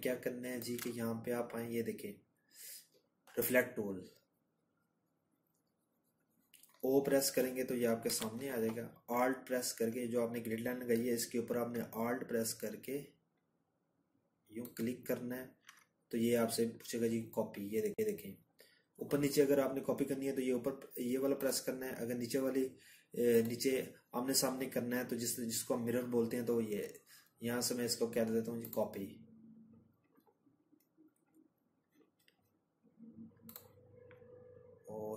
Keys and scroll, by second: 33.1 ctrl+z.